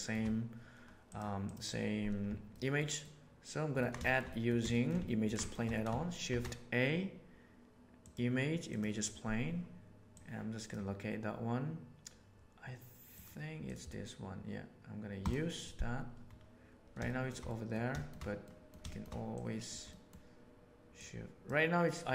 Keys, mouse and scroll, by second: 2.5-3.8 ctrl+middle drag, 3.9-4.4 shift+middle drag, 4.6 shift+middle click, 5.0 ctrl+middle drag, 5.4 shift+middle click, 5.5 shift+middle click, 6.2 shift+a, 17.0 shift+middle drag, 17.4 middle click, 17.9 shift+middle click, 18.4 middle click, 18.8 shift+middle click, 19.3 click, 19.6 right click, 19.8 middle click, 20.9 right click.